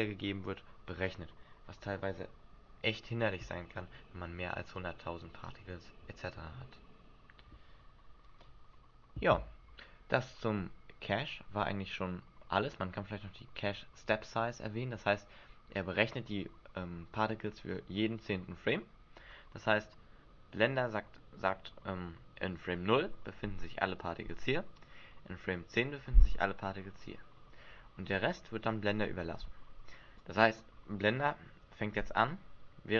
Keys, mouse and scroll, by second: 11.4-13.0 scroll down 2, 30.2 click.